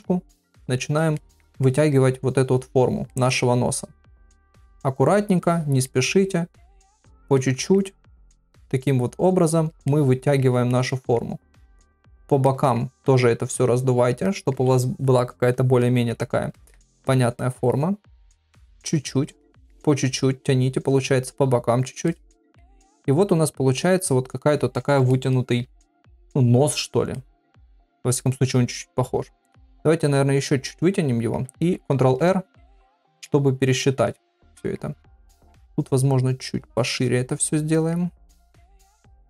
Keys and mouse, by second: 0.7 click, 1.2 middle click, 1.6 middle click, 2.5 click, 3.1 middle click, 4.2 click, 5.4 middle click, 6.7 click, 7.4 middle click, 8.3 click, 9.3 click, 9.9 middle click, 10.9 middle click, 11.7 click, 12.4 middle click, 13.5 click, 14.2 middle click, 15.8 middle click, 16.5 middle click, 17.4 middle click, 18.5 click, 19.4 middle click, 20.4 click, 21.3 click, 22.1 middle click, 23.2 click, 25.3 shift+middle click, 27.2 ctrl+middle click, 27.6 middle click, 29.7 click, 30.8 click, 31.9 ctrl+r, 33.3 middle click, 34.1 middle click, 35.3 middle click, 36.1 click, 36.7 middle click, 37.7 middle click, 38.4 click, 38.8 middle click.